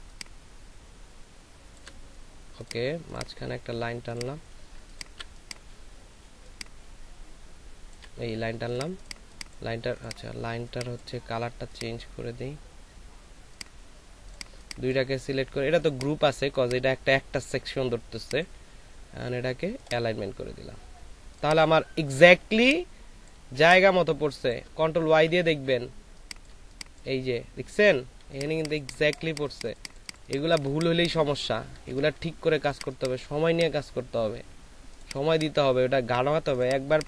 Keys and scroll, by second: 4.8 ctrl+alt+space, 6.2 ctrl+alt+space, 6.8 ctrl+alt+shift+space, 22.4 ctrl+space, 25.2 y, 25.9 ctrl+space, 31.7 a, 32.5 y, 32.5 s.